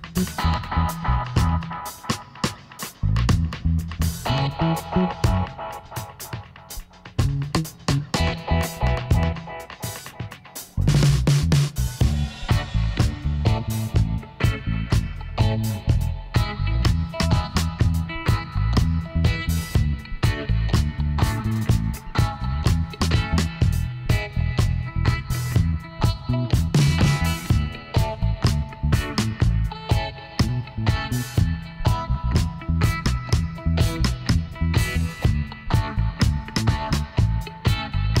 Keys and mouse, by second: 2.6 ctrl+r, 4.1-5.7 right drag, 5.5 g, 7.8 ctrl+r, 8.7-10.9 drag, 9.5 g, 11.5-13.2 right drag, 12.5-14.4 drag, 15.4-17.2 right drag, 16.2-18.1 drag, 17.8 right click, 18.1-19.8 middle drag, 19.8 Tab, 20.8 z, 21.8 z, 22.9 Tab, 24.3 middle click, 25.2-27.0 right drag, 26.2 e, 28.3 s, 30.6 s, 32.7 click, 33.6 middle click, 34.4 click, 35.3 ctrl+r, 36.8 s.